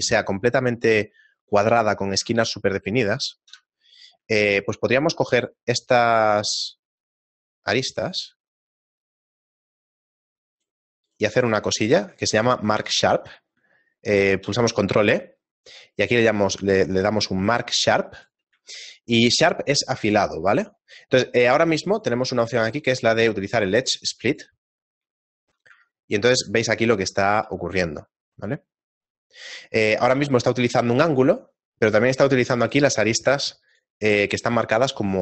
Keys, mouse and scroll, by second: 2.2 ctrl+Tab, 3.5 ctrl+KP_Add, 4.4 shift+middle click, 5.0 ctrl+Tab, 6.2 right click, 6.5 right click, 6.7 shift+middle click, 7.2 shift+right click, 7.7 shift+right click, 9.1 shift+right click, 10.5 shift+right click, 11.5 shift+middle click, 12.5 middle click, 12.9 middle click, 14.3 shift+middle click, 14.5 ctrl+e, 18.7 shift+middle click, 22.1 click, 25.7 Tab, 26.6 shift+middle click, 28.4-28.9 scroll down 1, 32.2 click, 32.6-35.2 click.